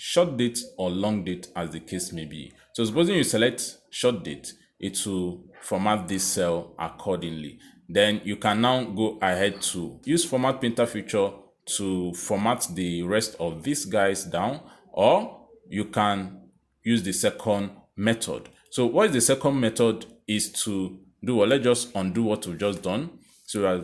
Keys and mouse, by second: 4.7 click, 7.3 click, 11.2 click, 11.3 click, 12.4 click, 13.9 click, 15.0 click, 17.6 ctrl+z, 18.2 ctrl+z, 18.8 ctrl+z, 19.4 ctrl+z, 20.8 click.